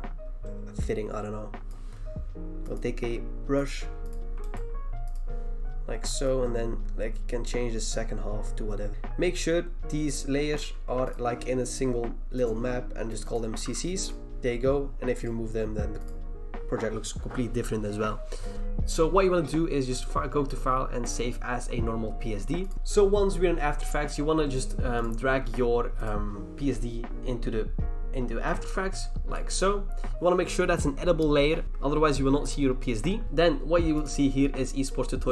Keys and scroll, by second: 8.9 v, 13.5 typing, 23.5 BackSpace, 23.8 BackSpace.